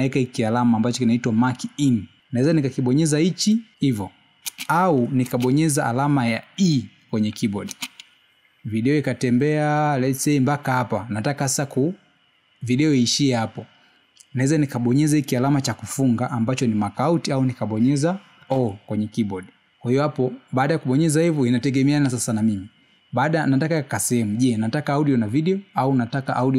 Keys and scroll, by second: 7.5 space, 10.7 space, 20.1 o.